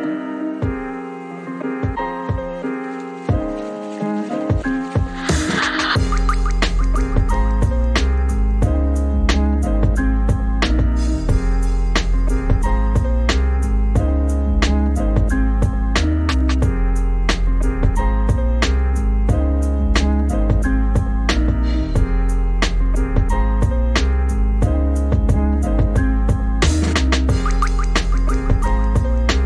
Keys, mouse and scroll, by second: 0.6 click, 0.8 click, 1.6-1.9 scroll up 3, 1.9 shift+middle click, 2.2 Tab, 2.5 Tab, 3.0-3.7 scroll down 3, 4.2 shift+middle click, 4.8 click, 6.5 click, 6.8 g, 8.6 click, 8.8 g, 10.0 click, 11.3 j, 11.8 click, 12.6 shift+click, 13.3 shift+click, 14.3 Delete, 15.6 click, 16.2 e, 16.6 r, 17.0 g, 18.0 click, 18.3 click, 18.5 g, 18.8 s, 19.1 middle click, 19.8 Tab, 19.9 right click, 20.0 middle click, 20.3 click, 20.4 Tab, 20.4 middle click, 20.9 g, 21.1 r, 21.3 g, 21.9 click, 22.1 g, 22.4 middle click, 22.6 click, 23.1 click, 23.1 middle click, 23.3 g, 23.7 click, 23.8 g, 25.1 middle click, 25.4 Tab, 25.5 middle click, 25.7 Tab, 25.9 middle click, 26.1 click, 26.2 middle click, 26.7 s, 27.6 click, 28.6 g, 29.1 Tab, 29.4 Tab.